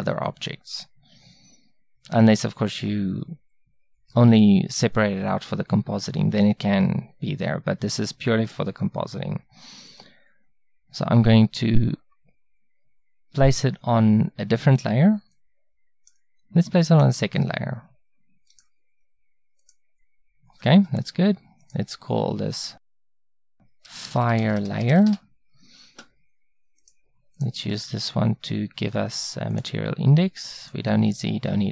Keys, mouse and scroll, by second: 29.6-31.7 drag.